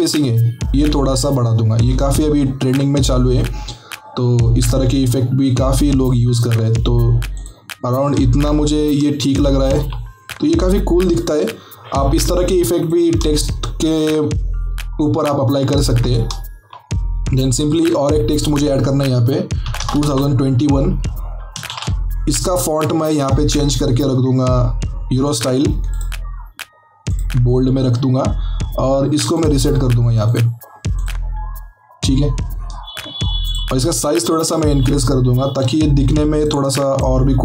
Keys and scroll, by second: 19.7 KP_2, 19.7 KP_0, 19.8 KP_2, 20.0 KP_1, 21.6 ctrl+a, 34.4 ctrl+t.